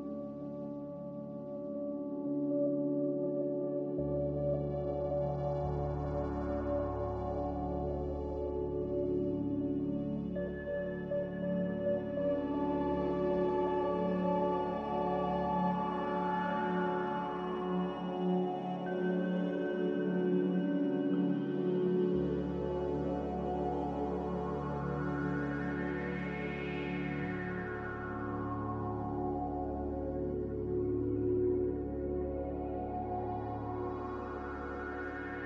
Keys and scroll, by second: 33.7 ctrl+z.